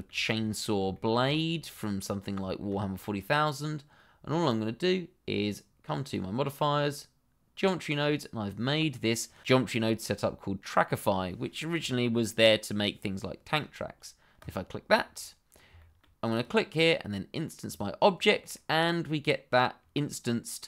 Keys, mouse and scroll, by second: 0.3-0.6 scroll down 1, 0.9 shift+middle click, 1.3 scroll up 1, 1.7 middle click, 2.6 shift+middle click, 6.0 click, 14.3 click, 15.2 middle click, 15.9 shift+middle click, 16.1 click, 18.5 middle click.